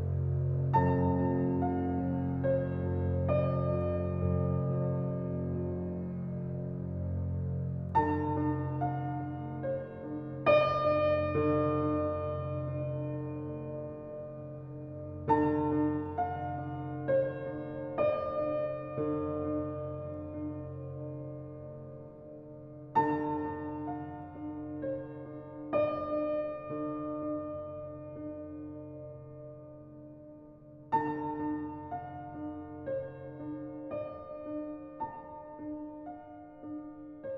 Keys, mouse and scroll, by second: 0.3 click, 1.3 alt+right click, 1.6 alt+click, 1.9 alt+middle click, 2.3 alt+right click, 2.6-3.9 alt+drag, 3.9-5.4 ctrl+drag, 5.4-8.5 right drag, 8.7 alt+click, 9.2 alt+right click, 9.9 alt+middle click, 10.9 right click, 11.6 click, 16.8 alt+click, 17.8 ctrl+z, 18.7-19.9 right drag, 19.9-22.4 alt+drag, 22.4 alt+click, 22.9 alt+right click, 23.2 alt+click, 23.6 alt+middle click, 24.2 alt+right click, 24.6 ctrl+click, 25.7 alt+right click, 26.2 alt+middle click, 26.6 alt+right click, 28.9 click, 32.6 alt+right click, 32.9 alt+click.